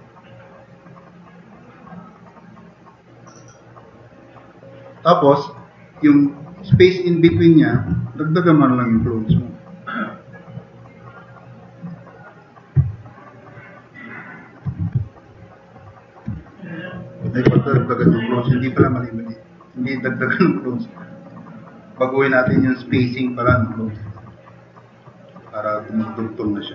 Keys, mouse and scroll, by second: 2.1 middle drag, 3.8-5.5 drag, 6.0-6.4 drag, 13.0 middle drag, 13.5-13.9 drag, 14.1 middle drag, 14.3 drag, 15.1 click, 17.5 ctrl+z, 19.9 click, 20.3 drag, 21.0 drag, 26.5 drag.